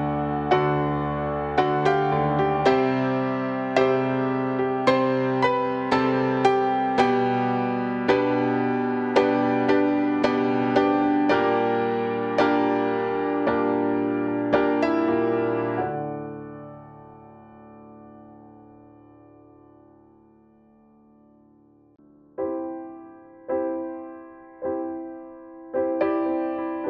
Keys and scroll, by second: 5.0 ctrl+u, 6.4 ctrl+u.